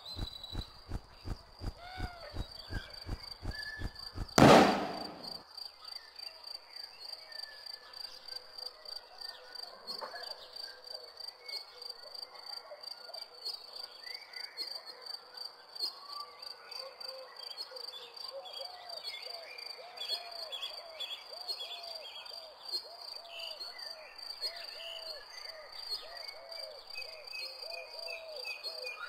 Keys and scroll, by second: 3.8 m, 4.3 q, 13.0 o, 14.9 e, 24.2 o.